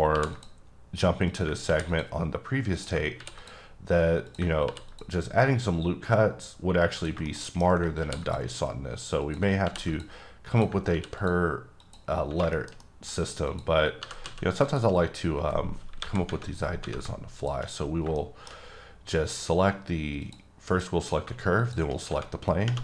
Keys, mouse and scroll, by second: 0.1 ctrl+r, 0.3 ctrl+click, 1.6 ctrl+r, 1.9 ctrl+click, 3.1 ctrl+r, 3.4 click, 4.6 ctrl+r, 4.9 ctrl+click, 7.2 middle click, 8.0 ctrl+r, 8.2 click, 9.6 ctrl+r, 9.9 click, 10.5 click, 10.9 ctrl+r, 11.2 click, 12.1 scroll down 2, 12.5 shift+middle click, 13.4 click, 14.0 g, 14.2 z, 14.6 click, 14.9-16.0 scroll up 2, 16.0 KP_7, 17.3 shift+click, 17.9 scroll down 1, 18.1 middle click, 18.5-18.8 scroll down 2, 20.2 click, 20.7 click, 21.6 shift+click.